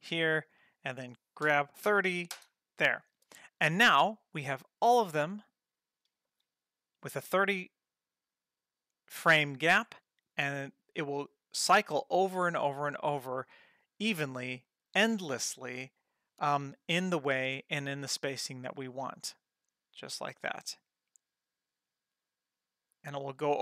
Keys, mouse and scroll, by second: 1.5 g, 3.3 ctrl+middle click, 3.9 middle click, 5.1-6.2 drag, 6.9 space.